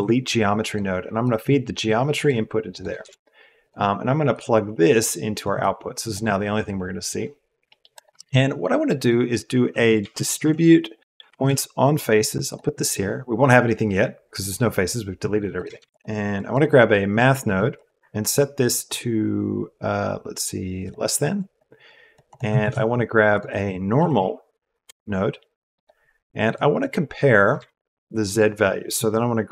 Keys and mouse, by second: 1.2-2.2 drag, 2.7 click, 3.0 shift+a, 3.6-5.5 drag, 6.0 click, 8.1 shift+a, 15.5 click, 15.7 shift+a, 16.4 click, 17.7-20.9 drag, 21.4 click, 22.0 click, 22.2 click, 22.6 shift+a, 26.7 click, 27.5 shift+a.